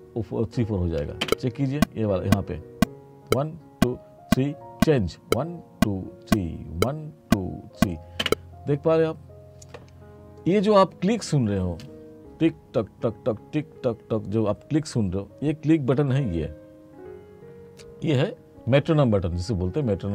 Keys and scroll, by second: 1.3 space, 8.3 space.